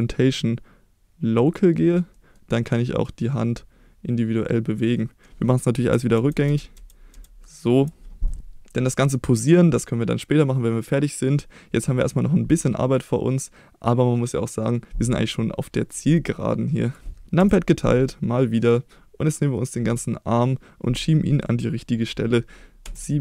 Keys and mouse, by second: 2.1 middle click, 3.0-4.7 drag, 5.0 middle drag, 6.1 ctrl+z, 6.4 ctrl+z, 6.7 ctrl+z, 7.1 ctrl+z, 16.8 click, 17.4 KP_Divide, 18.5 click, 22.8 KP_7.